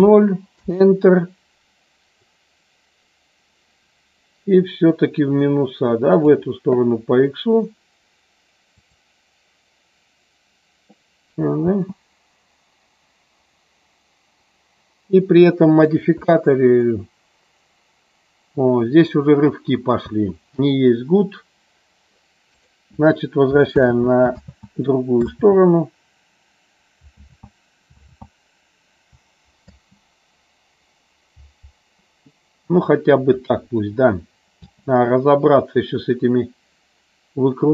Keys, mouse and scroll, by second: 2.1-6.2 drag, 8.8 click, 11.6 space, 20.0 space, 22.4 click, 23.8 ctrl+z, 29.5 ctrl+z, 29.5 space, 34.8 space.